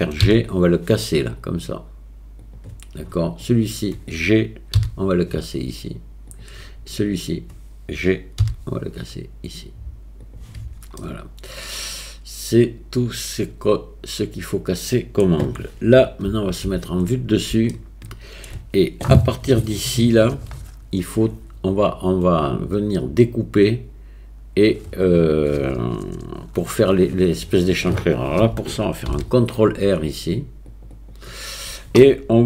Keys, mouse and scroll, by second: 0.3 g, 4.8 g, 7.1 click, 11.0-15.2 middle drag, 16.3 KP_7, 17.7 shift+middle click, 29.1 ctrl+r.